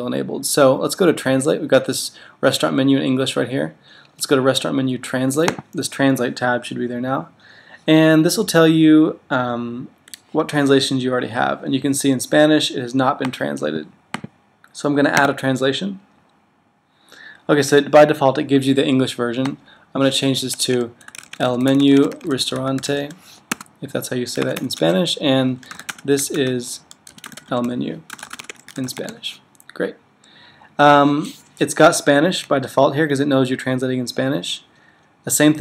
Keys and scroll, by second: 25.4-28.9 typing.